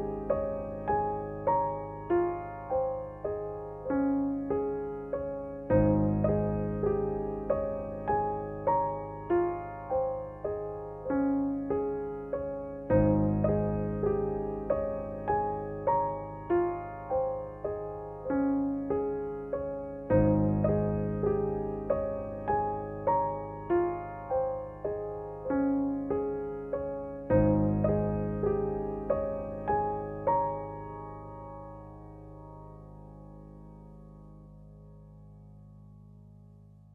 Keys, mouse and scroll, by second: 0.9 space, 1.2 click, 1.3 space, 3.1 click, 3.3 space, 3.8 click, 3.9 space, 5.0 click, 5.1 space, 6.1 click, 6.2 space, 8.8 click, 8.9 space, 10.1 space, 11.1 click, 11.4 space, 11.7-14.3 drag, 14.3 ctrl+-, 15.5 space, 15.7 click, 16.0 space, 16.7 click, 16.8 space, 19.0 ctrl+d, 20.7 click, 23.8 ctrl+j, 24.2 ctrl+u, 25.6-27.5 drag, 27.9 space, 28.2 click, 28.4 space, 29.2 ctrl+=, 29.6-30.4 typing, 31.4-32.9 typing, 33.2-35.0 drag, 35.0 space, 35.2 click, 35.5 space, 36.1 click.